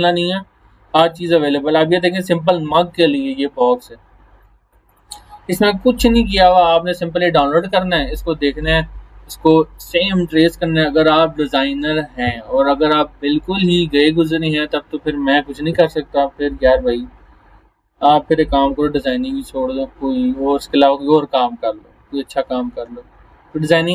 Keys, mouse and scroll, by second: 1.1 click, 4.4 click.